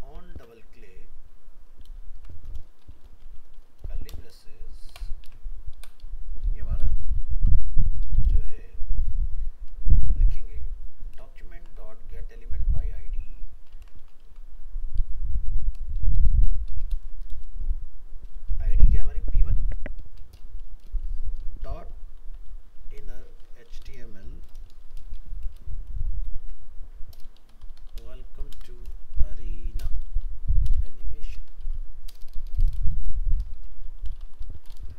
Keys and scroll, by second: 0.3 ctrl+c, 1.4 ctrl+Right, 1.8 ctrl+v, 7.2 ctrl+s, 11.2 shift+Right, 14.3 ctrl+c, 16.9 ctrl+v.